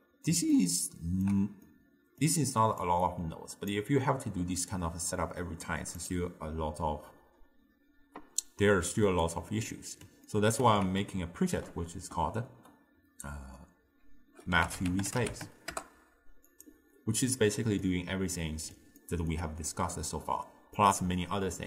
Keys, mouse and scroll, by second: 0.6-2.8 ctrl+middle drag, 2.8 click, 6.0 click, 9.7-10.9 middle drag, 10.9 ctrl+a, 17.9-21.6 middle drag.